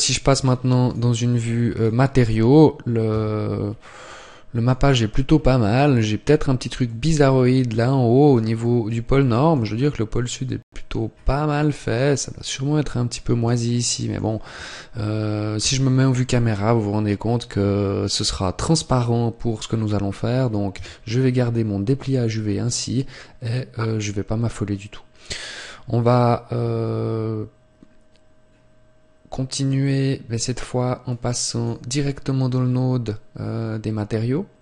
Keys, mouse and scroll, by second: 2.0 click, 3.0 Tab, 3.5-3.9 scroll up 1, 3.9 middle click, 4.7-5.3 scroll up 4, 5.3 middle click, 6.7 middle click, 8.5 middle click, 9.2 middle click, 10.9-11.5 scroll up 3, 11.3 middle click, 11.9-12.9 scroll up 1, 12.9 middle click, 12.9 scroll up 1, 13.7 middle click, 15.4 KP_0, 20.5 Tab, 31.1 click, 34.3 click.